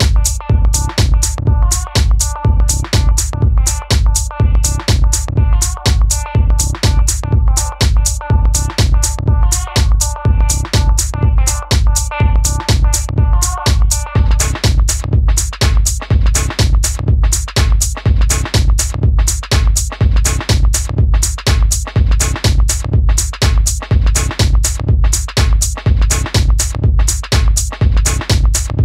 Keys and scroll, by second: 5.9 Left, 6.3 Up, 6.6 Up, 6.8 Down, 12.4 BackSpace, 18.7 d.